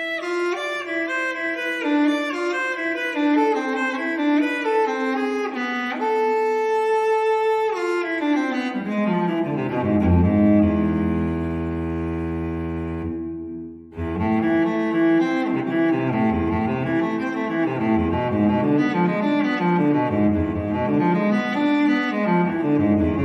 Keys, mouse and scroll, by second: 0.5-2.1 drag, 2.5 click, 2.9 click, 3.5-3.9 scroll down 2, 4.0-5.9 middle drag, 5.9 scroll up 2, 6.1 middle click, 6.9 0, 8.9 click, 10.1 click, 11.7 click, 14.3 2, 15.3 0, 16.5 click, 17.4 5, 19.6 click, 22.0 click.